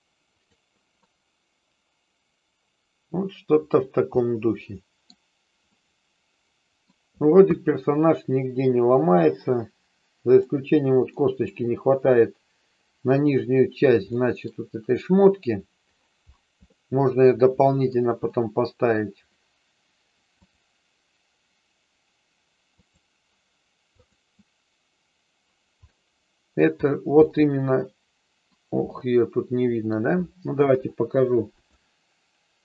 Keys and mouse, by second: 0.4 click, 0.9-3.7 middle drag, 4.2 middle click, 5.7-6.8 middle drag, 7.5-10.3 middle drag, 11.0 middle click, 14.2 middle click, 16.7-17.9 middle drag, 18.2 middle click, 20.4-24.7 drag, 25.8 middle click, 27.2-28.4 middle drag, 28.9 middle click, 30.7 KP_3, 31.5 click.